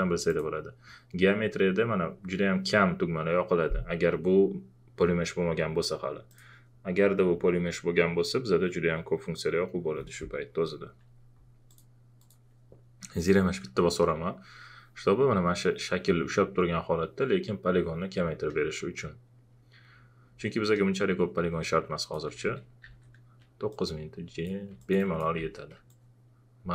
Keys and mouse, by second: 0.3 click, 6.3 click, 11.7 click, 11.7 click, 21.9 click, 22.0 alt+click, 22.4 alt+shift+f, 23.7 shift+click, 25.4 ctrl+z, 25.9-26.7 ctrl+drag.